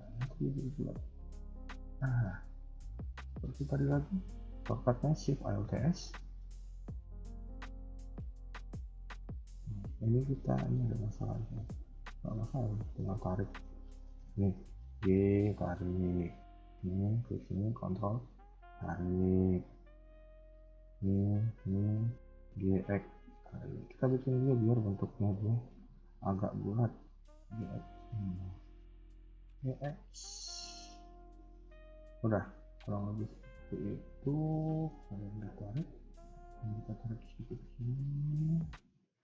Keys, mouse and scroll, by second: 0.0-0.5 scroll up 1, 0.5 s, 2.2 scroll down 1, 2.4 middle click, 3.4 middle click, 5.5 alt+shift+s, 9.5 scroll up 1, 10.2 scroll up 1, 10.4 shift+middle click, 11.4 click, 12.0 g, 16.5 click, 16.5 g, 17.5 ctrl+click, 18.2 g, 20.8 click, 21.5 ctrl+click, 22.3 g, 24.2 shift+middle click, 25.2 click, 25.8 ctrl+click, 26.3 g, 28.0 click, 28.5 ctrl+click, 29.1 g, 34.1-34.4 scroll down 2, 34.4 middle click, 35.5-36.2 scroll up 2, 36.2 click, 36.5 g, 38.7 click, 39.0 g.